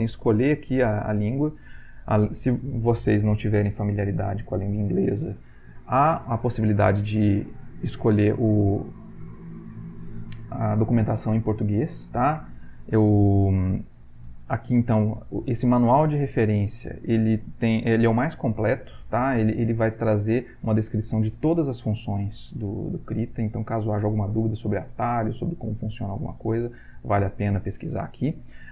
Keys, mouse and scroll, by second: 1.3 click.